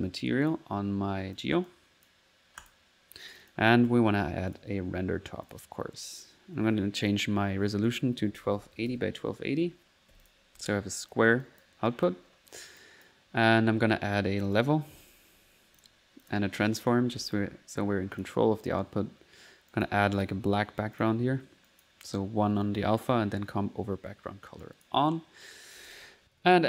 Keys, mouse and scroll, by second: 0.5 click, 1.4 click, 1.7 click, 2.6-4.2 typing, 3.3 click, 4.5 click, 5.5 click, 6.3 click, 7.1 click, 7.9 click, 10.3 click, 10.6 middle click, 11.1 click, 11.4 click, 11.9 click, 14.5 right click, 14.7-15.4 typing, 15.8 click, 16.3 click, 16.8 right click, 17.0-17.9 typing, 18.2 click, 18.7 click, 19.7 click, 21.0 click, 21.7 click, 22.7 click, 24.6 click, 25.9 click, 26.5 alt+n.